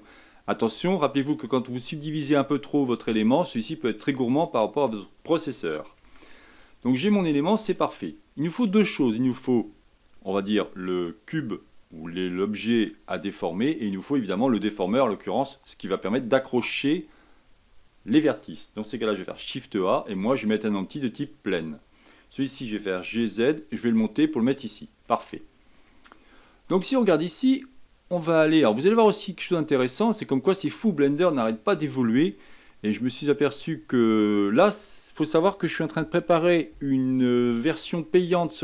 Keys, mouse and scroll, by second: 0.0-6.0 middle drag, 6.0 Tab, 7.2-8.9 middle drag, 8.9-12.1 scroll down 2, 19.3 shift+a, 22.6 g, 25.0-26.9 middle drag, 26.9-27.6 drag, 28.5-37.9 drag.